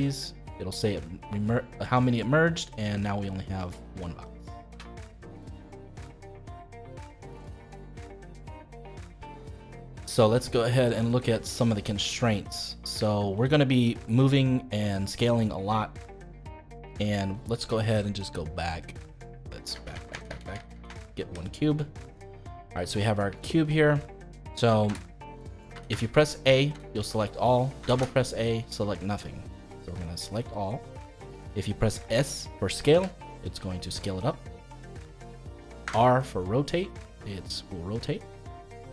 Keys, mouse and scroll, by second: 2.7 middle click, 3.4 click, 4.2 click, 4.6 g, 6.4 middle click, 7.1-7.4 scroll down 2, 7.4-11.7 middle drag, 11.7 scroll down 1, 11.9 middle click, 12.7-13.0 scroll up 2, 13.0-15.0 shift+middle drag, 15.0 click, 16.3-18.8 middle drag, 18.8 click, 19.7 ctrl+z, 19.9-20.8 ctrl+z, 21.8-23.0 middle drag, 23.0-23.4 scroll up 2, 23.4-24.8 shift+middle drag, 24.8 a, 25.7 a, 26.7 a, 27.8 a, 27.9 a, 29.6 a, 32.9 s, 35.8 r.